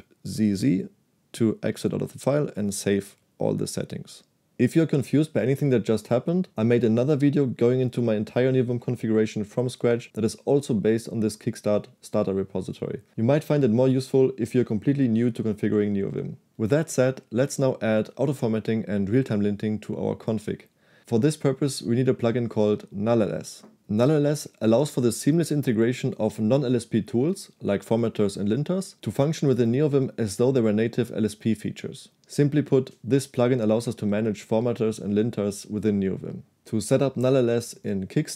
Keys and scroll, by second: 0.4 shift+z, 0.6 shift+z.